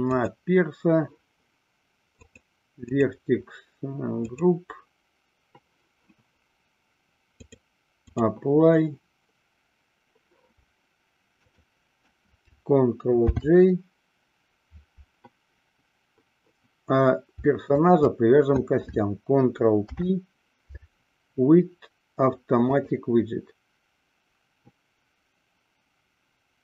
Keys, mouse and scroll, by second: 2.4 click, 3.0 click, 4.9 click, 7.5-8.8 drag, 11.5 shift+click, 13.7 ctrl+j, 17.8 shift+click, 19.8 ctrl+p.